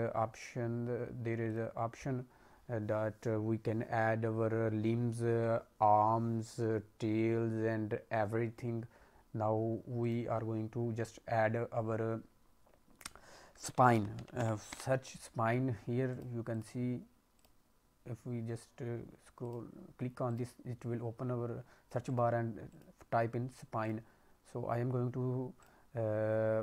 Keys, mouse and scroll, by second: 1.4 click, 16.4 click, 17.3 click, 18.1-18.8 scroll down 1, 19.3 click, 20.2 click, 20.9-22.0 scroll down 2, 22.0 click, 25.5 click.